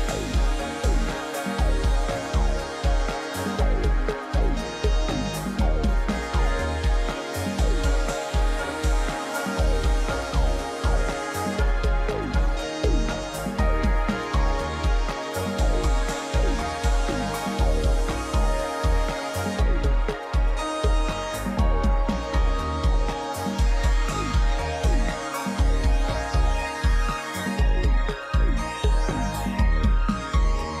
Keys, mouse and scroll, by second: 22.5 shift+click, 23.2 right click, 27.4 ctrl+j.